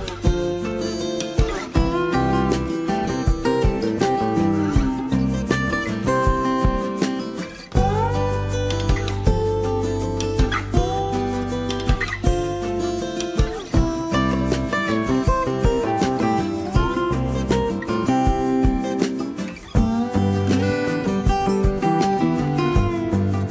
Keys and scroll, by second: 0.7 Return, 6.8 Return.